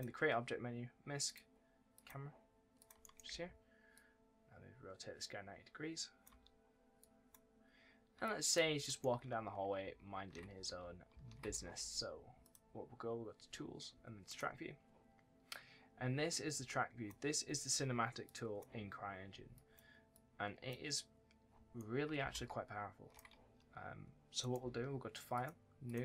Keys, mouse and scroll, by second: 3.2 2, 3.8 click, 6.2 1, 6.9 click, 8.9 right click, 8.9-11.4 typing, 9.3 scroll up 1, 9.8-10.2 shift+scroll down 1, 12.3 click, 18.1 click, 21.7 right click, 22.1 s, 23.2 w, 24.3 right click, 24.5 w, 25.2 click.